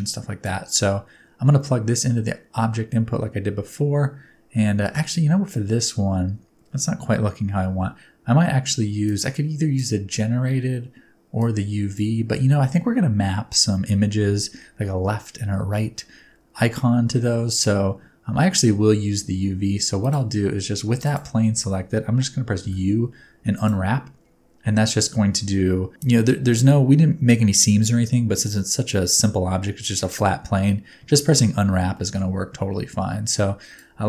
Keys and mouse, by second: 0.4-1.9 drag, 9.0-9.7 drag, 11.4 click, 19.4 Tab, 20.9 3, 21.0 click, 22.6 u, 32.0 middle click, 33.9-34.0 drag.